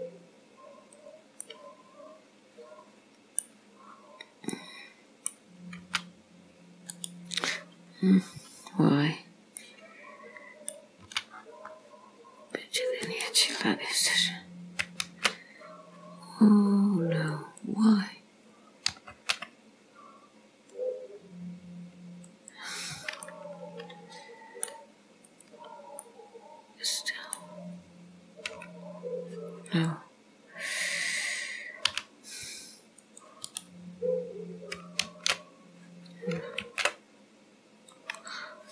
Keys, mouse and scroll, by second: 1.5 middle click, 3.9-4.4 scroll up 3, 4.7 middle click, 5.9 g, 7.0 right click, 7.2 right click, 9.6 middle click, 11.1 c, 15.1 alt+m, 17.4 click, 19.0 m, 23.4 middle click, 25.3 click, 26.1 middle click, 28.6 n, 29.7 click, 31.9 c, 35.1 alt+m, 36.5 m.